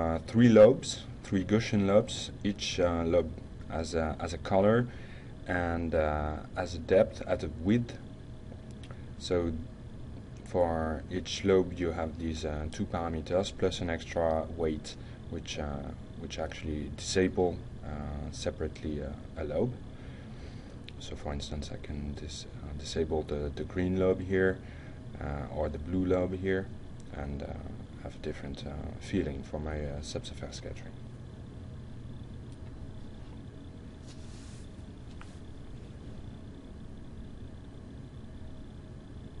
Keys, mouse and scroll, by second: 13.8-14.4 drag, 14.6-18.8 drag, 19.9-23.0 drag, 23.1-25.6 drag, 26.2 click, 35.5 click, 36.7-39.4 drag.